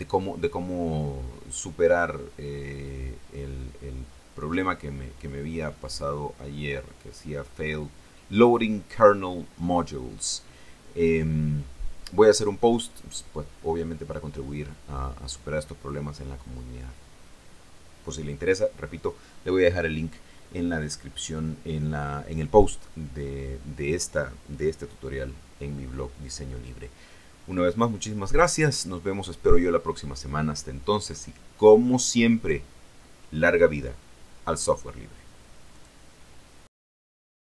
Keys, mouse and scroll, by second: 35.6 click, 37.4 click.